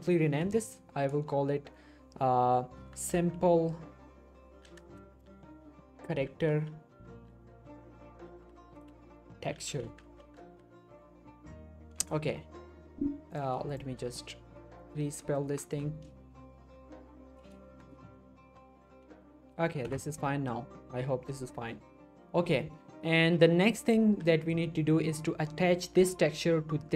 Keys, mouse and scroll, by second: 2.8-4.8 typing, 6.0-10.4 typing, 12.0 Return, 13.8 click, 14.6 Right, 18.5-19.0 typing, 19.8 Return, 23.5 scroll down 1, 23.7 middle click, 23.9 scroll up 1, 24.0 g, 24.4 right click, 24.6 middle click.